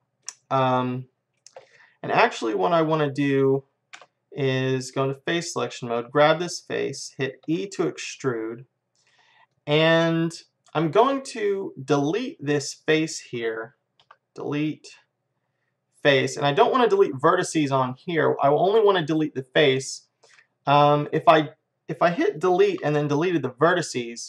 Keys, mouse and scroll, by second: 0.0 middle click, 0.5-2.0 middle drag, 4.0 space, 6.1-7.7 drag, 7.5 e, 9.9 middle click, 10.9 middle click, 14.0 Delete, 17.6-22.7 middle drag, 22.7 Delete.